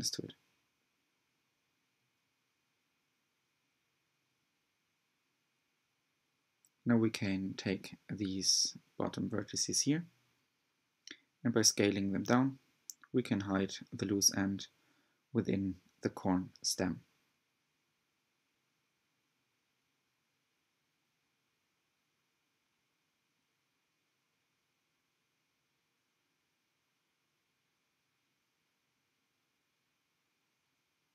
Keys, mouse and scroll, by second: 0.0 shift+click, 1.4 click, 2.0 shift+middle click, 2.3-3.0 scroll up 9, 3.3 e, 5.2 s, 6.5 g, 9.3 click, 9.9-11.0 shift+middle drag, 11.0 s, 13.3 g, 16.2-17.7 middle drag, 18.0 click, 18.2 middle click, 19.0-19.6 scroll down 1, 19.6 click, 21.7 click, 22.5 click, 23.8 click, 24.6 click, 25.9 click, 26.6-28.0 middle drag, 28.0-28.5 scroll down 3, 28.5 alt+z, 29.8 alt+click.